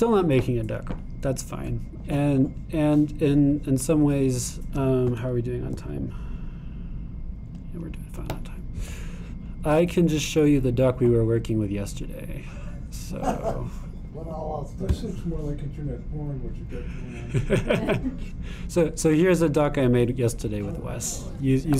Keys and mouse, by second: 15.9-18.5 drag, 18.6-21.7 drag.